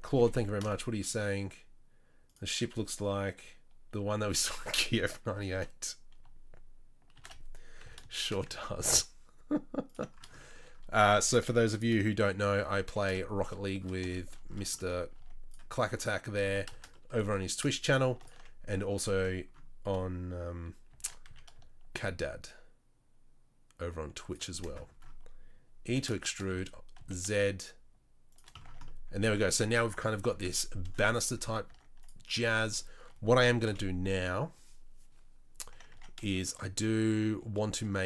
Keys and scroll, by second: 0.1 g, 7.1 shift+d, 12.4 shift+r, 12.8 shift+r, 15.2 Tab, 16.4 Tab, 17.2 3, 20.9 shift+d, 25.8 e, 28.7 Tab, 31.4 Tab, 31.7 Tab, 32.3 Tab, 33.6 KP_3, 35.9 Tab.